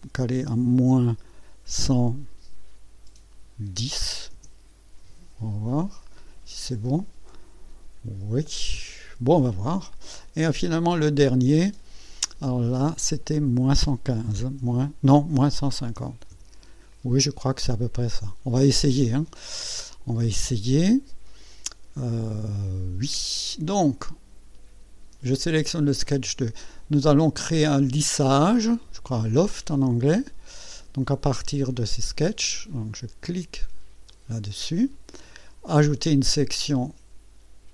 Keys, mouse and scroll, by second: 0.9 KP_Subtract, 1.8 KP_1, 3.8 KP_1, 4.0 KP_0, 4.3 KP_Enter, 6.4 scroll down 2, 11.0 click, 12.2 click, 14.6 KP_Subtract, 15.1 KP_1, 15.6 KP_5, 15.9 KP_0, 16.3 KP_Enter, 26.0 click, 34.1 click, 35.9 click.